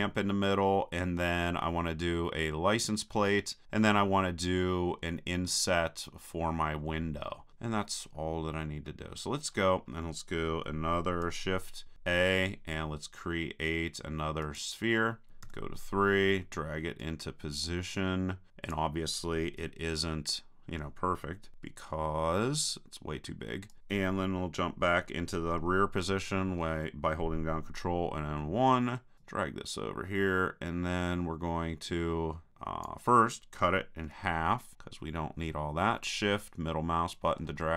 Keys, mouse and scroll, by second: 8.6-11.6 middle drag, 11.9 shift+a, 15.4 KP_3, 17.0-18.5 drag, 21.5 s, 23.8-25.3 drag, 26.1 ctrl+KP_1, 29.1-30.8 drag, 34.0 KP_3, 34.7-37.7 middle drag.